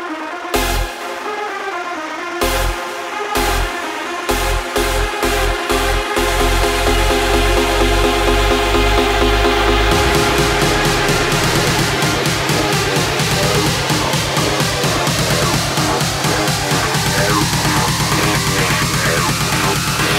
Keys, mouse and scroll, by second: 5.6 space, 6.7-9.6 drag, 13.3-14.8 right drag, 14.8-15.9 drag, 15.9 space.